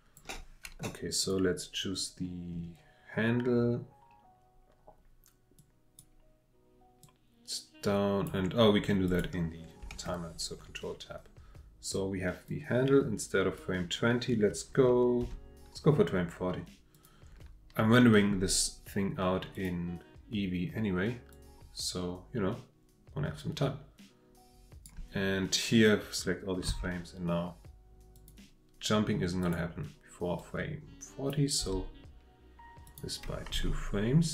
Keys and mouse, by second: 1.2 click, 5.6 click, 7.0-8.3 drag, 9.1 click, 9.9 ctrl+Tab, 12.5-13.6 drag, 15.2 g, 16.9 click, 19.5 click, 21.3-25.0 drag, 26.7 g, 28.1 click, 29.4 click, 30.4-31.3 drag, 31.6 g, 32.9 click.